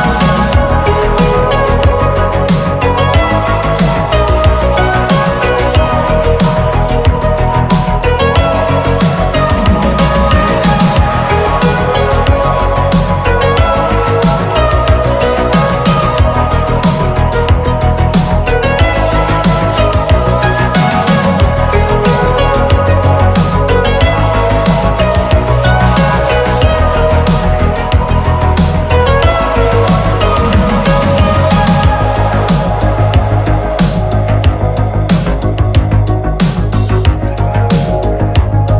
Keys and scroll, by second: 0.1 ctrl+z, 0.3 ctrl+z, 0.7 ctrl+z, 1.4 space, 2.0 ctrl+z, 2.7 ctrl+z, 3.2 ctrl+z, 3.5 space, 4.3 ctrl+z, 4.7 space, 5.1 ctrl+z, 6.8 ctrl+z, 7.7 space, 9.3 ctrl+z, 10.5 space, 11.0 ctrl+z, 11.7 ctrl+z, 12.0 space, 12.4 ctrl+z, 12.6 ctrl+z, 13.6 ctrl+z, 14.2 ctrl+z, 14.9 ctrl+z, 15.6 ctrl+z, 16.3 ctrl+z, 17.2 ctrl+z, 17.6 ctrl+z, 18.0 ctrl+z, 18.4 ctrl+z, 20.7 space, 22.4 ctrl+z, 22.8 ctrl+z, 23.2 ctrl+z, 24.2 ctrl+z, 24.4 ctrl+z, 25.2 ctrl+z, 25.5 space, 26.8 ctrl+z, 27.1 ctrl+z, 27.3 ctrl+z, 27.5 ctrl+z, 28.3 ctrl+z, 28.8 ctrl+z, 30.6 space, 33.5 space, 34.0 ctrl+z, 34.6 ctrl+z, 35.2 ctrl+z, 35.7 ctrl+z, 35.9 ctrl+z, 36.2 ctrl+z, 36.5 ctrl+z, 36.8 ctrl+z, 37.3 ctrl+z, 37.6 space, 38.5 space.